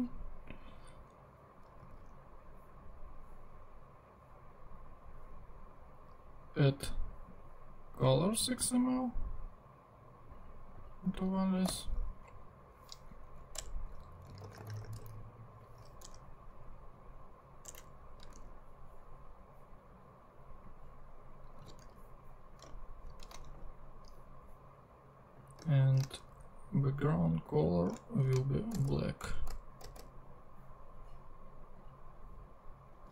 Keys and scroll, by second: 2.0 super+Tab, 8.0 super+Tab, 11.6 super+n, 13.2 Down, 13.6 Return, 14.0-15.5 typing, 16.0 Return, 17.6 Return, 18.2 super+Return, 18.4 super+Tab, 21.6 super+c, 21.8 super+Tab, 22.6 shift+super+Tab, 23.0 shift+super+Left, 23.4 shift+super+v, 24.4 super+v, 25.8 shift+super+Right, 26.2 shift+super+BackSpace, 28.0 alt+shift+Right, 28.8 0.